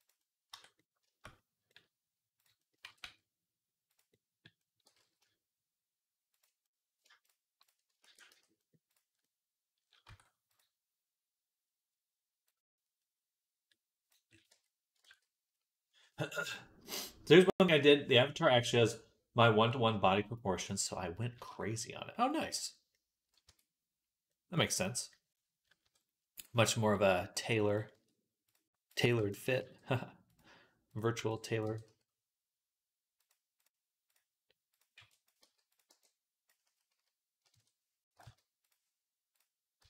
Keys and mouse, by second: 0.3 Tab, 0.9-3.9 shift+drag, 2.7 g, 3.9-7.4 middle drag, 4.7 g, 7.4 shift+click, 7.5-9.6 shift+middle drag, 7.9 ctrl+a, 9.6-14.1 middle drag, 9.9 Tab, 14.1-24.6 drag, 14.3 Tab, 14.9 ctrl+s, 23.3 Tab, 24.6-25.6 middle drag, 25.6 KP_3, 27.8 z, 29.0 b, 29.4 g, 31.0 b, 31.5 g, 34.8 b, 35.2 g, 35.7 b, 36.5 s, 37.9 g, 39.5 click, 39.7 z.